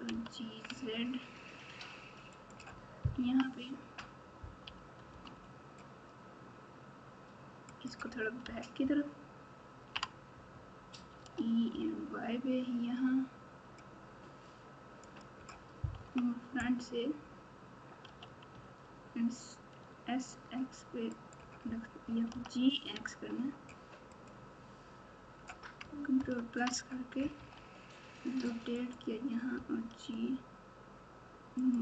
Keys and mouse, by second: 0.1 g, 3.2 KP_3, 4.6 g, 8.8 ctrl+KP_6, 9.3 ctrl+KP_6, 11.2 e, 15.9 KP_1, 18.0 s, 22.3 g, 26.2 ctrl+KP_Add, 27.3 r, 29.5 g.